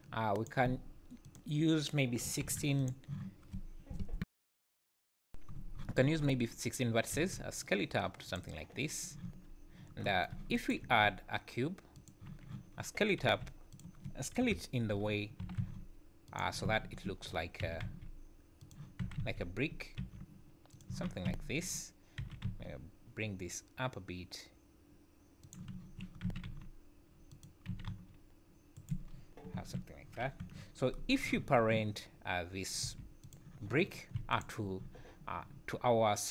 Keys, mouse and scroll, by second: 0.3 click, 1.3 click, 7.2 s, 8.6-9.1 scroll down 1, 9.1 Tab, 9.3 Tab, 9.8 scroll down 4, 10.6 shift+right click, 10.8 shift+a, 12.7 scroll up 1, 13.3 g, 14.4 KP_Decimal, 15.1-15.4 scroll down 6, 15.4 s, 16.7 `, 17.6 s, 19.0 s, 20.9 z, 21.3 `, 22.2 g, 26.3 `, 26.3 s, 27.7 s, 29.1-29.5 scroll down 6, 29.5 `, 30.0 scroll down 2, 30.4 KP_7, 30.7 scroll up 3, 31.4 z, 32.8 g, 34.3 shift+click.